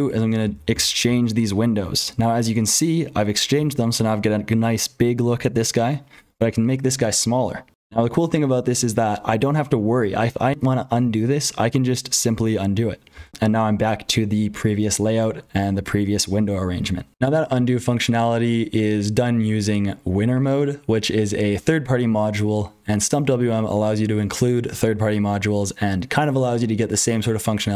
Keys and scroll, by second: 0.0-27.7 typing, 13.1 ctrl+z, 17.1 super+l, 17.1 alt+x, 17.1 Return, 17.1 F12.